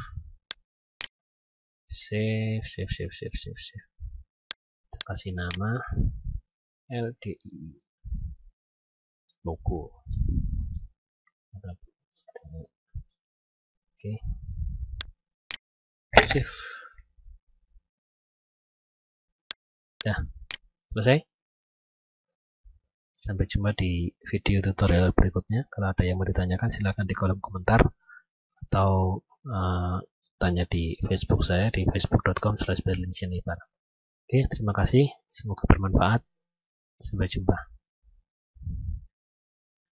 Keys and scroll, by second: 39.3 ctrl+F10.